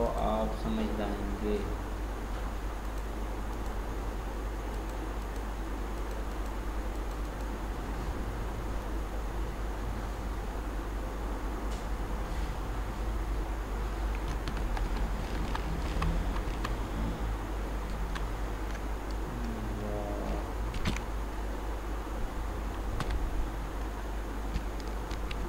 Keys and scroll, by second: 20.9 ctrl+d, 25.0 ctrl+d.